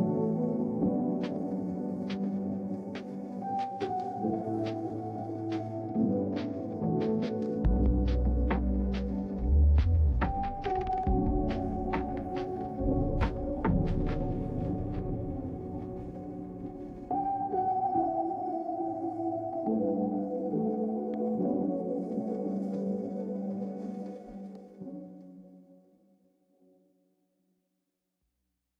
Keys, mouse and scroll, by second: 1.1-4.6 drag, 4.9 middle click, 8.8 click, 10.8-15.0 drag, 18.4 click, 22.4-23.9 scroll down 2, 22.5-24.9 middle drag, 23.9-24.9 scroll up 2.